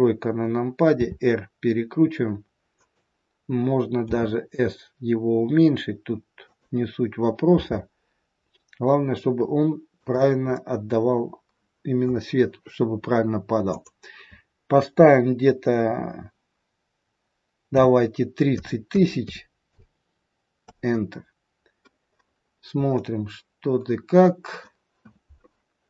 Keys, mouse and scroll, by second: 0.9 r, 4.0 s, 7.5 g, 10.4 middle click, 19.2 KP_0, 22.5 scroll down 3, 23.0 middle click.